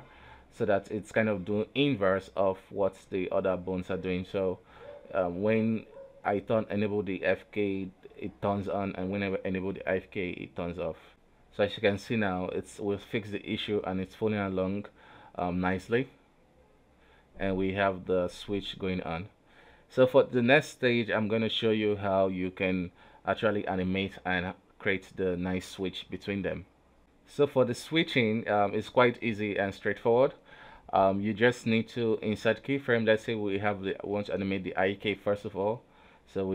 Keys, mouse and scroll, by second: 4.8 click, 5.1 a, 5.4 alt+r, 5.6 alt+g, 7.1 right click, 8.1 right click, 8.6 right click, 8.9 right click, 9.5 right click, 11.0 right click, 11.2 g, 12.5 right click, 12.7 r, 13.9 right click, 14.0 r, 15.7 r, 18.1 right click, 18.4 r, 19.0 a, 19.2 alt+r, 19.5 alt+g, 20.2-21.1 scroll down 1, 21.4 right click, 22.4 r, 23.2 middle click, 23.6 r, 25.3 right click, 25.4 right click, 25.7 g, 26.6 middle click, 27.0 ctrl+z, 27.4 right click, 27.5 r, 27.9 a, 28.3 alt+r, 28.5 alt+g, 28.6 alt+`, 31.6 ctrl+z, 32.4 click, 33.0-33.8 middle drag, 34.5 KP_4, 34.9-35.8 drag, 35.8 KP_3.